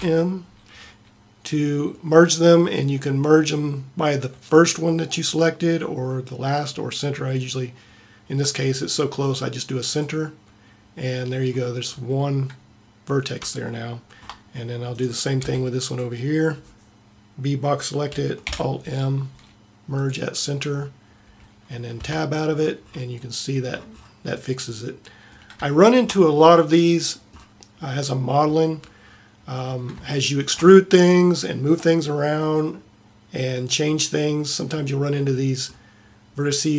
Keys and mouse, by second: 0.0 alt+m, 11.4 middle click, 15.0 click, 15.5 b, 18.6 alt+m, 20.7 middle click, 21.2 a, 22.2 Tab.